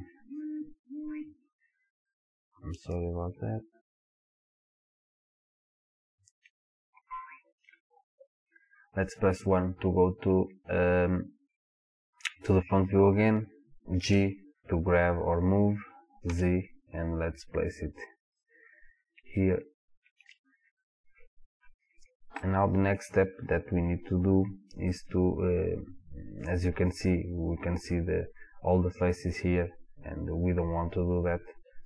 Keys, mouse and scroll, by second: 14.1 g, 18.4 click, 19.4-28.9 shift+middle drag, 21.3 scroll down 2, 21.4-22.3 scroll up 2, 22.3 scroll up 1, 28.9 click.